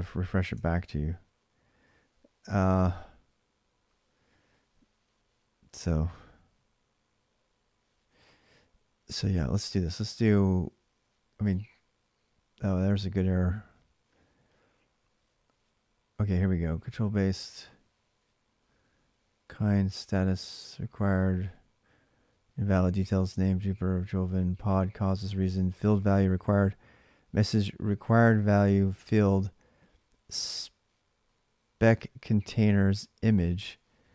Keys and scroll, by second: 0.3 alt+Tab.